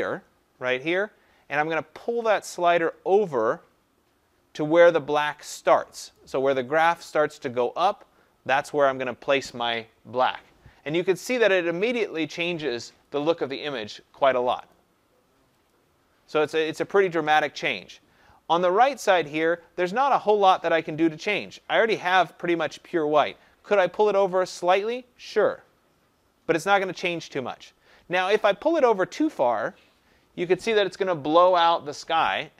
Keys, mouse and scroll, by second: 6.1 click, 12.0 click, 13.2 click, 14.7 click, 15.7 click.